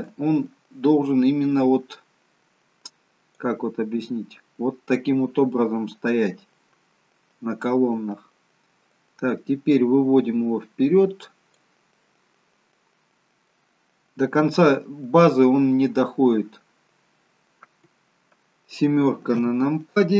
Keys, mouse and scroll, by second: 0.1 click, 5.6 middle click, 8.0-8.4 scroll down 1, 8.6 scroll down 1, 8.9 click, 15.9 middle click, 19.4 KP_7.